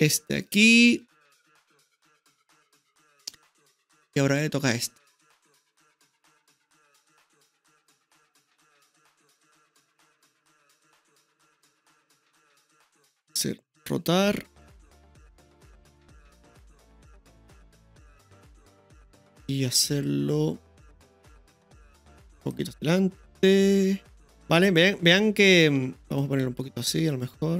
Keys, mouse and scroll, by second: 2.2-4.0 middle drag, 4.0 right click, 5.0-7.7 drag, 8.4-9.6 drag, 10.8 ctrl+KP_3, 12.9-13.4 middle drag, 14.6 r, 17.1-21.7 middle drag, 21.7 click, 23.4 click, 24.3-25.5 middle drag, 26.2-27.5 drag.